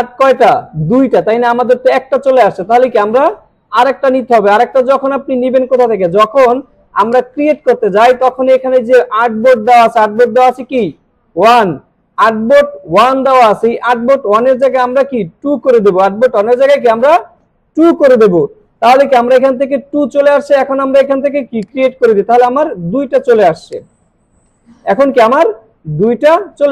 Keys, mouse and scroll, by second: 2.3 alt+scroll down 1, 2.9 alt+scroll up 1, 3.9 alt+scroll down 1, 4.1 space, 4.3-4.9 drag, 14.6 click, 21.7 click, 23.2 alt+scroll down 1, 23.7-25.2 click, 24.1 space, 26.6 alt+scroll up 2.